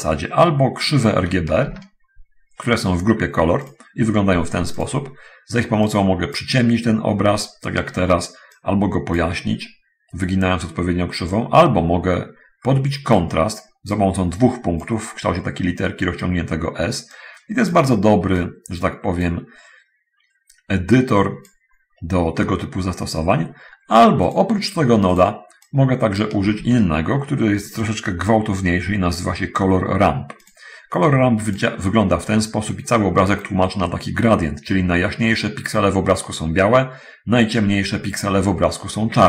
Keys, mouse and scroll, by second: 1.6 shift+a, 3.9 click, 4.6 click, 6.1 click, 8.8 click, 11.6-13.6 drag, 14.1 click, 17.4 click, 18.4-19.6 drag, 21.2 click, 24.2-24.7 drag, 25.4 click, 26.6 click, 30.6 click.